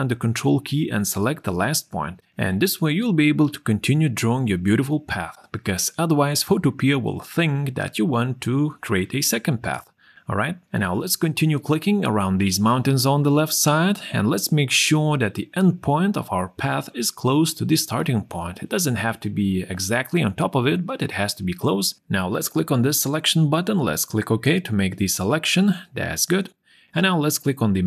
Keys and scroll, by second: 8.7 ctrl+0.